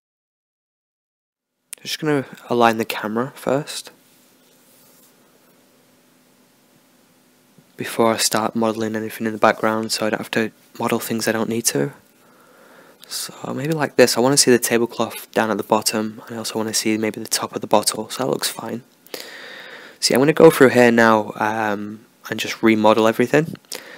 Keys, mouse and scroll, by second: 0.0-1.9 drag, 2.2-5.0 middle drag, 6.9 g, 9.2 r, 11.6 g, 11.8 middle click, 12.8 g, 21.4-23.9 middle drag.